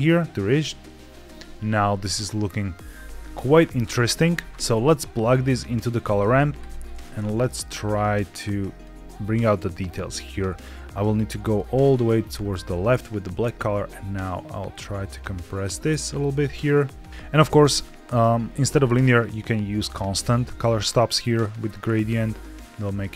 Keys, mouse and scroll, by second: 1.8-2.1 scroll down 2, 4.5 ctrl+z, 4.5-5.0 scroll down 1, 5.0 click, 6.5 ctrl+shift+click, 7.9 click, 9.0-11.4 drag, 11.7-12.9 scroll up 6, 12.6 middle click, 13.3-17.1 drag, 18.6-20.1 drag, 20.9-23.1 drag.